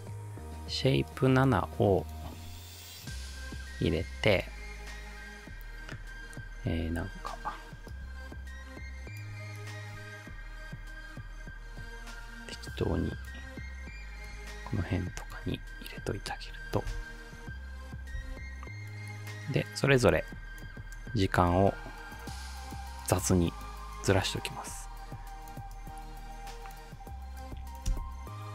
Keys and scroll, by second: 16.9 space, 18.2 space, 27.9 space.